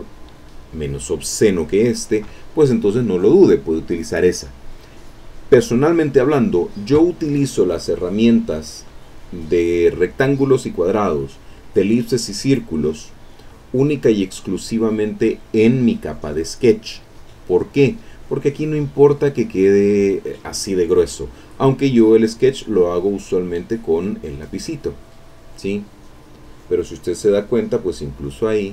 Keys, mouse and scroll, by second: 0.1 click, 8.8-10.9 drag, 11.4 click, 12.3 click, 14.4 click, 15.9 click, 17.8 click, 18.4 click, 18.5 middle click, 19.4-20.4 middle drag, 22.6 click, 24.6 click, 25.8 click, 27.8 click.